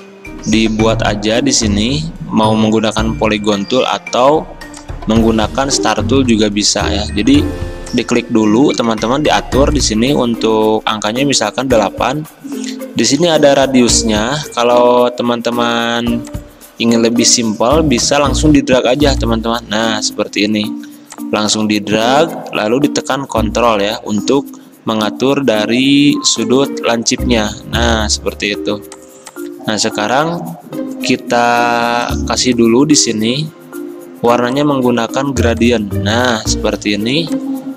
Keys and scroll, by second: 3.6 ctrl+z, 10.9 8, 18.6 ctrl+z, 20.8 ctrl+z, 28.6 v, 30.4 d.